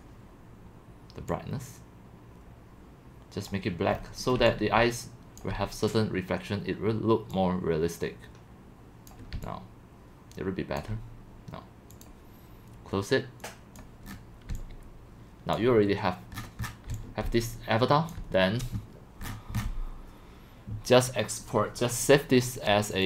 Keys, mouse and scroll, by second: 3.9 middle click, 3.9 scroll, 4.1-5.7 typing, 7.3-9.1 drag, 9.4-11.0 c, 12.0-14.1 drag, 14.1 middle click, 14.1 scroll, 14.5-18.7 typing, 16.4-16.8 scroll, 18.1 click, 19.2-20.1 scroll.